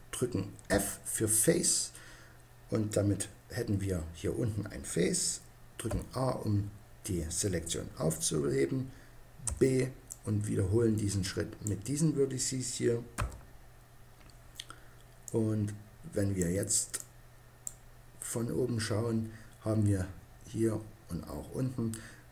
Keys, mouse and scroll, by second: 0.5 f, 5.7 a, 9.3 b, 13.0 f, 17.5 click.